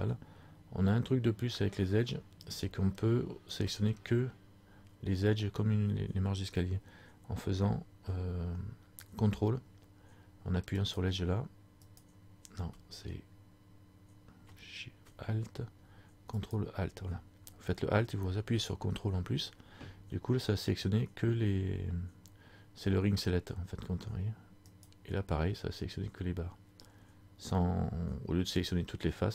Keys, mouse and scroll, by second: 10.8 ctrl+right click, 16.5 ctrl+alt+right click, 24.9 ctrl+alt+right click.